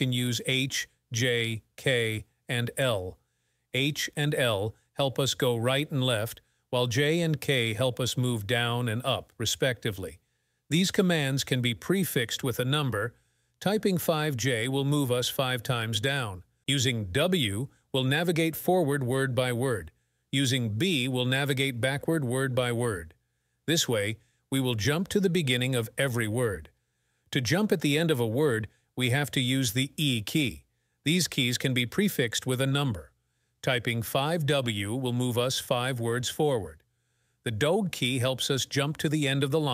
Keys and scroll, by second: 0.0-4.9 typing, 14.0-15.2 typing, 18.1 w, 19.0 w, 20.8 b, 21.4 b, 22.3 b, 28.4 e, 29.6 e, 30.3 e, 31.1 e, 33.3-34.3 typing, 38.0 shift+4.